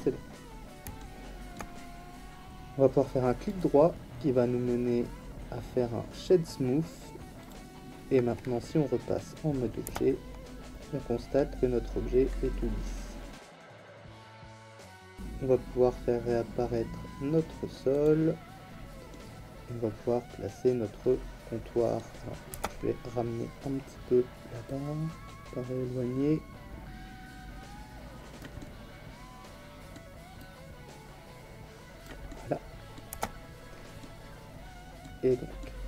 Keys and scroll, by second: 9.8 Tab, 22.5 Tab, 33.1 Tab.